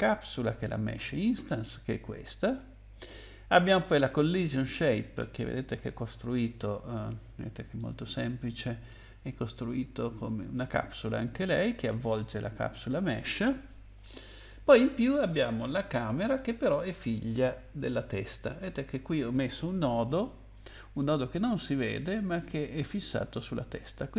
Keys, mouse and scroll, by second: 0.8 click, 4.2 click, 7.7 middle click, 15.9 click, 17.9 click, 20.0-20.6 scroll up 4, 21.0 middle click, 22.8-23.4 scroll down 4.